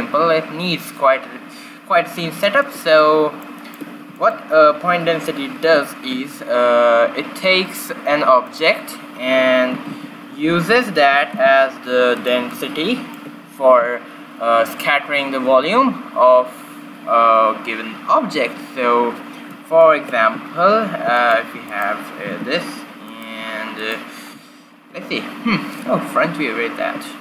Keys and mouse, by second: 1.9 middle click, 5.4 shift+a, 9.6 g, 11.0 g, 12.5-14.4 middle drag, 19.8-21.4 middle drag, 20.1 q, 21.4-22.6 drag, 21.4 a, 22.1 r, 22.7 click, 23.7 click, 24.6 right click, 25.0 middle click, 25.3 click, 25.3 middle click, 26.1 q.